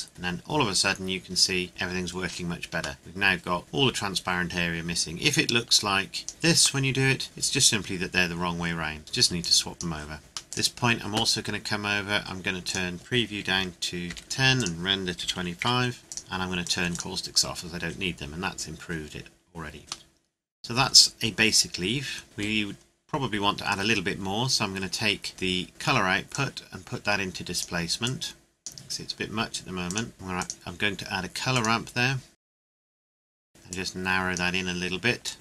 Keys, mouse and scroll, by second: 3.0 middle click, 5.7 click, 6.8 middle click, 9.4 click, 10.4 middle click, 10.6 click, 13.5 KP_1, 14.1 KP_0, 14.2 KP_Enter, 14.6 click, 15.2 KP_2, 15.4 KP_5, 15.6 KP_Enter, 16.0 scroll down 1, 16.1 click, 20.1 middle click, 23.4 scroll up 1, 25.0 scroll down 1, 26.3 click, 32.5 middle click, 32.9 click.